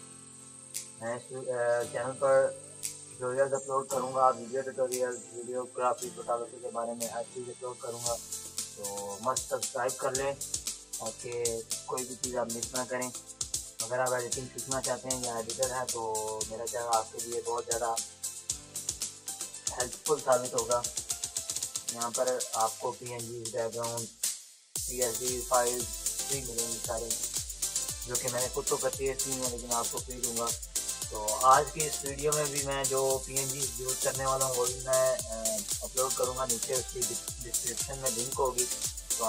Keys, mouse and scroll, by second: 2.4-4.3 typing, 2.6 click, 3.0 click, 4.5 click, 5.8 [, 7.1-8.1 typing, 7.2 click, 10.6 space, 10.7 click, 10.9 [, 11.2-15.3 drag, 15.3 space, 15.3 click, 15.5 [, 16.0-20.7 drag, 20.7 space, 20.9 click, 21.2 space, 21.6 ], 21.9 ], 22.3-23.8 drag, 23.8 [, 24.1 [, 24.2 click, 25.5 ], 25.8 click, 26.6 [, 26.9 [, 27.0 click, 28.1 space, 28.3 [, 28.7 click, 29.6-31.9 typing, 29.7 click, 32.0 click, 33.1 [, 33.4 [, 33.5 click, 34.4 space, 34.5 click, 36.1 ctrl+-, 36.5 ], 36.9 ], 37.0 space, 37.4 click, 38.3 ], 38.6 ], 38.7 click.